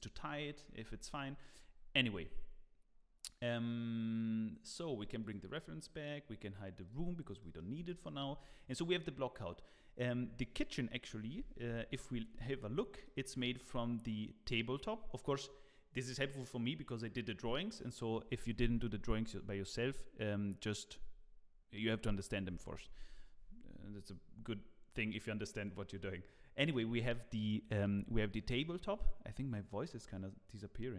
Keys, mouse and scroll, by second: 5.2 click, 5.6-6.8 scroll down 1, 6.8 click, 7.4 middle click, 7.9 shift+middle click, 8.4 click, 9.4 middle click, 11.3 h, 11.9 KP_1, 12.6 scroll up 5, 13.0 shift+middle click.